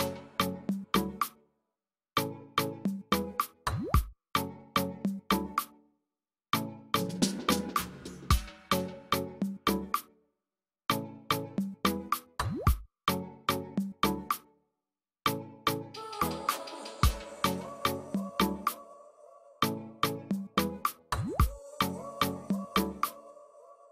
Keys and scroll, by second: 11.0 F9.